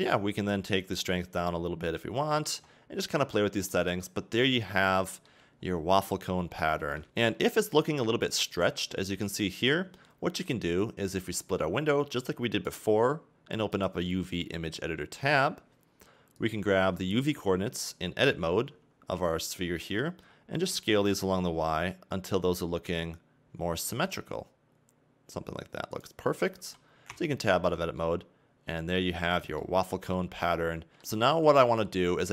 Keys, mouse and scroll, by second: 1.5 shift+click, 2.9 scroll down 2, 3.1 middle click, 3.9-5.4 scroll up 2, 5.7 scroll up 2, 6.4-7.0 scroll down 2, 7.0 middle click, 7.4 scroll up 2, 8.0 scroll down 1, 11.4 click, 16.5 click, 17.5 Tab, 19.8-20.7 scroll up 1, 20.7 s, 26.3-26.6 scroll down 1, 26.6 a, 27.1 Tab, 27.7 scroll up 2, 28.0 middle click, 29.8-30.1 scroll down 4, 30.2 middle click, 31.0-32.3 scroll up 3.